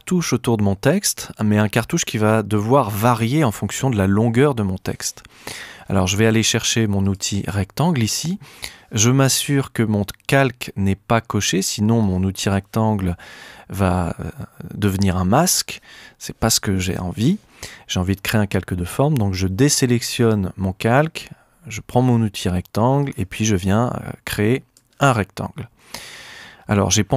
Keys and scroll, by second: 16.9 super+z.